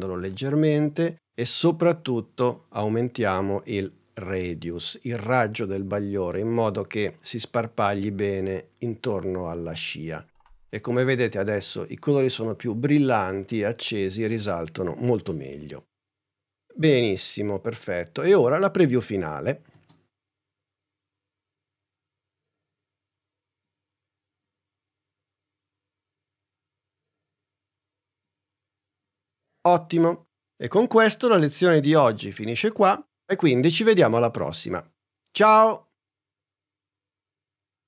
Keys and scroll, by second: 19.8 space.